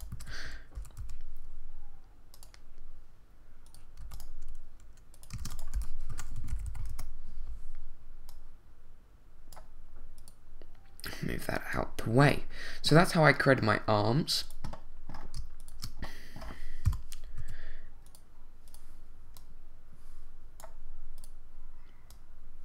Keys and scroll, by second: 0.1 super+z, 0.7 super+r, 1.0 y, 4.0 x, 5.7-6.6 typing, 6.9 Return, 16.8 shift+7, 17.4 z.